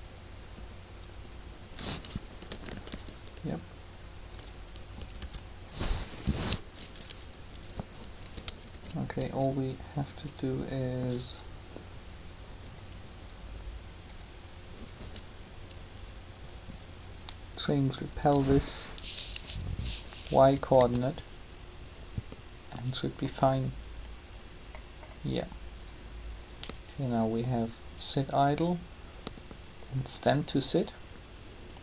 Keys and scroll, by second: 2.3 Up, 5.0 Down, 8.3 Up, 14.7 Up, 20.8 alt+a.